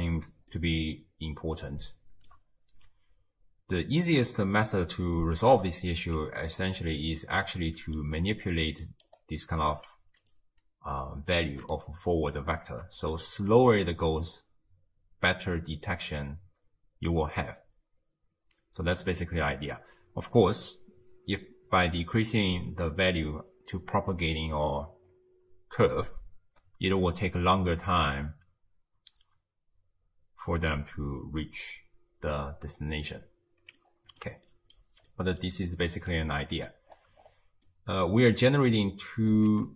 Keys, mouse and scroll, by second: 0.6-3.6 shift+middle drag, 5.6-8.1 middle drag, 8.1-8.9 scroll up 5, 8.9 middle click, 9.1-10.2 scroll up 1, 10.2 scroll up 2, 10.2-11.7 drag, 13.2 shift+space, 19.5 space, 25.1-26.2 scroll up 1, 26.2-26.7 scroll up 1, 27.4 space, 29.3 space, 33.8-36.3 middle drag, 36.3-37.7 scroll up 12, 37.7-38.8 middle drag, 38.8 click, 39.5 g.